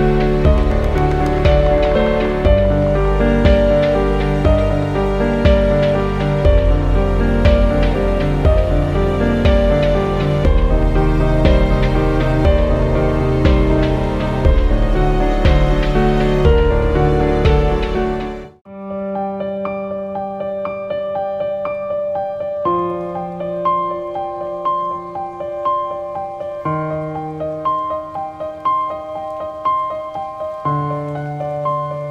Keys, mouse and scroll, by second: 0.5 click, 3.1 click, 15.3 scroll up 1, 16.6-17.2 scroll down 1, 20.4 space, 20.4 click, 20.8 space, 21.1 scroll down 1, 21.6 scroll up 1, 21.8 space, 22.0 click, 22.3 space, 22.5 scroll up 1, 23.7 click, 24.2 scroll down 1, 24.4 space, 24.5 click, 24.9 space, 25.6 click, 26.2 scroll down 1, 26.3 space, 26.5 click, 26.8 space, 27.6 click, 28.0 scroll down 1, 30.1 click.